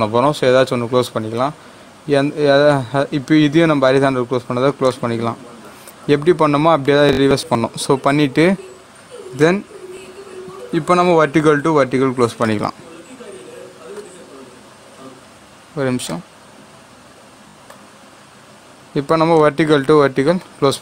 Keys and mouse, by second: 4.8-9.2 drag, 9.3-16.0 drag, 16.0-20.8 drag.